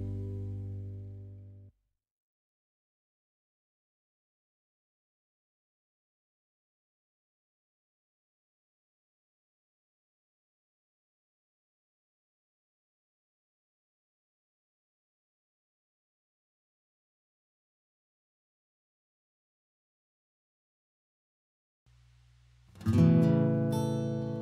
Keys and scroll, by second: 3.8 Escape, 4.0 Escape, 4.1 Escape, 5.4 b, 6.0 space, 6.4 b, 6.7 Escape, 7.8 b, 8.1 Escape, 8.3 Escape, 8.5 Escape, 9.9 b, 12.9 Escape, 13.1 Escape, 13.2 Escape, 24.0 Escape.